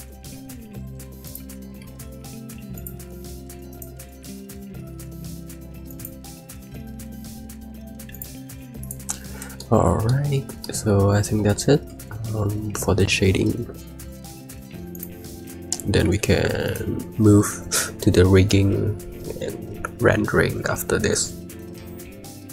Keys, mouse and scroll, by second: 15.9 z, 16.5 click.